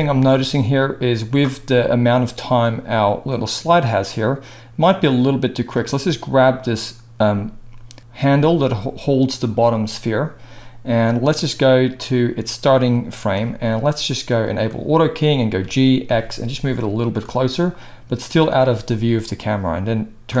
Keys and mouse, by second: 6.7-11.0 middle drag, 8.2 g, 11.0-14.5 drag, 14.5-18.3 middle drag, 15.6 g, 18.3 drag, 18.6-20.4 middle drag.